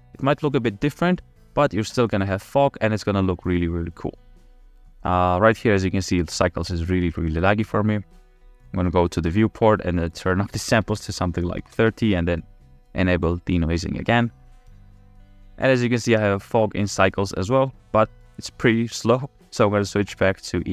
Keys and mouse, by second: 10.1-11.8 drag, 13.2 click, 20.3-20.7 drag.